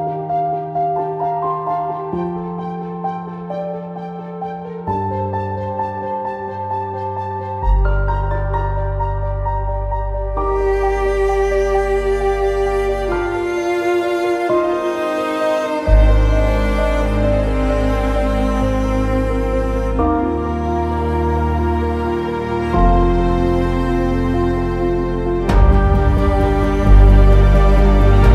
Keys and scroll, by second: 10.6 z.